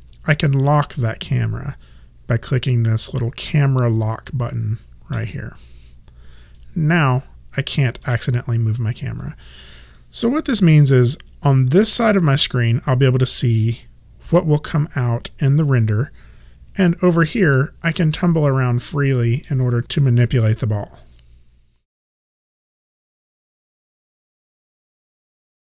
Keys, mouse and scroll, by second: 5.3 click, 6.7 alt+click, 16.9 alt+click, 18.3 alt+right click, 19.2 alt+middle click, 19.7 alt+right click.